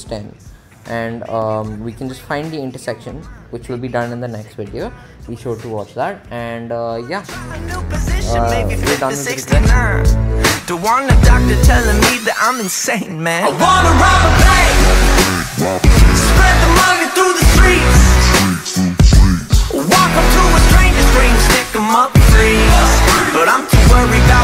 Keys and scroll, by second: 0.0-0.2 typing, 0.4 Return.